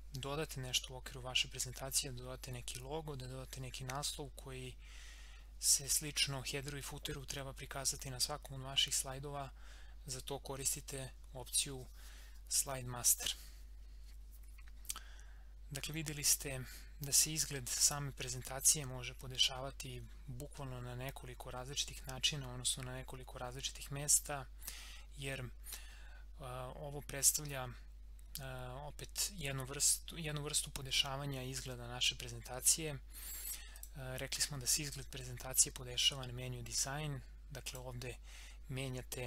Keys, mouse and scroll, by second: 15.9-17.8 drag, 33.7 click, 37.6 click.